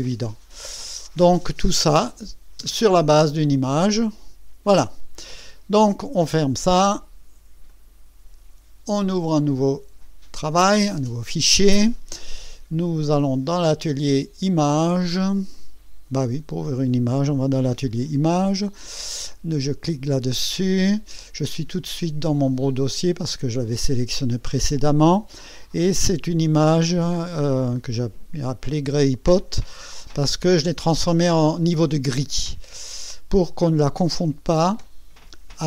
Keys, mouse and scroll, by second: 1.9 click, 2.6 space, 3.4-4.8 drag, 6.4 click, 7.6 click, 9.6 click, 13.1 click, 15.5 click, 19.6 click, 30.8 click, 32.8 click.